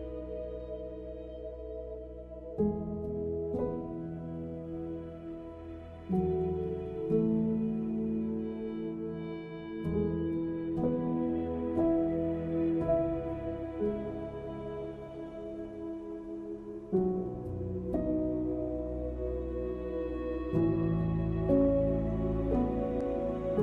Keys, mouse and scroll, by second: 0.1 alt+click, 0.6 alt+click, 1.1 e, 1.4 s, 2.1 middle click, 2.8 e, 3.5 click, 4.4 middle click, 4.6 scroll up 1, 4.8 scroll down 1, 5.0 middle click, 5.5 middle click, 6.1 middle click, 6.6-7.2 scroll up 2.